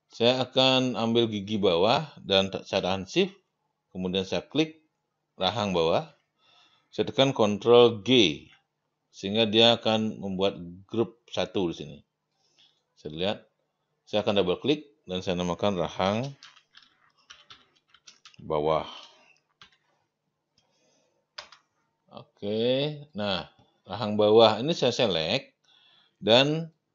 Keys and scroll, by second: 8.0 ctrl+g, 15.9-19.6 typing, 21.4 Return.